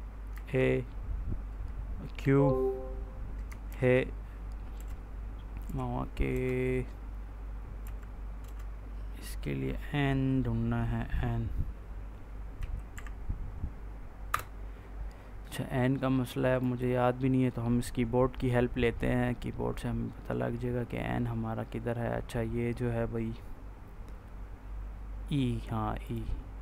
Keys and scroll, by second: 0.2 a, 2.1 q, 3.6 shift+h, 4.6 BackSpace, 5.5 h, 6.2 BackSpace, 7.7 i, 8.3 BackSpace, 12.5 z, 12.8 Insert, 14.2 BackSpace.